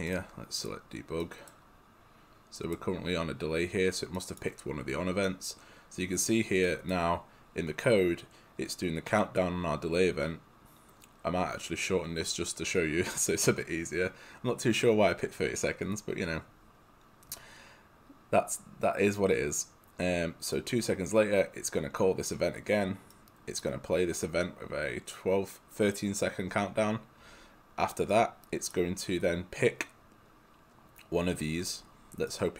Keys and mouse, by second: 1.3 right click, 23.2 right click.